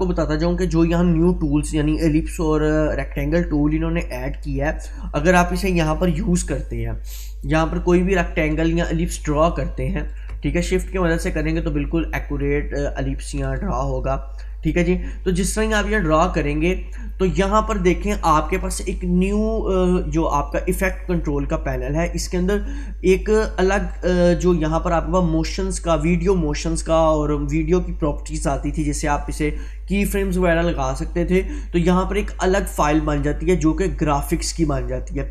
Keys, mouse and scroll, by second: 0.7-5.0 drag, 8.9-19.6 drag, 16.0-17.3 drag.